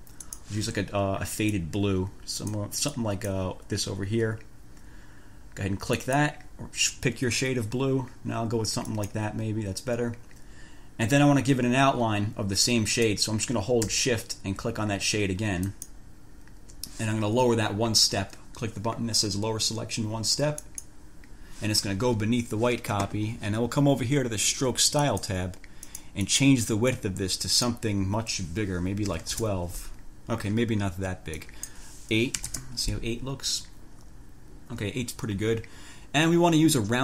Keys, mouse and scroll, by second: 0.5 click, 1.7-2.9 drag, 3.1 click, 6.2 click, 9.1 click, 15.9 shift+click, 20.9 click, 25.3 click, 26.1 click, 27.1 click, 29.0-29.9 typing, 31.6 click, 32.5 8, 32.7 Return.